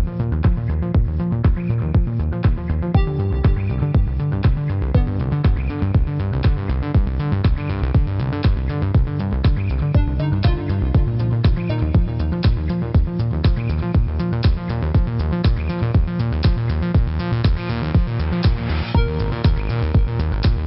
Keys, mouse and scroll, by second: 4.1 shift+click, 4.5 click, 7.7 space, 7.8 click, 10.0 shift+click, 10.2 click, 11.3 ctrl+=, 11.7 click, 14.6 click, 15.0 space, 16.4 a, 16.6 click, 17.6 Up, 18.2 click, 18.8 Down, 19.2 click, 19.8 ctrl+-, 20.0-20.5 typing, 20.2 click.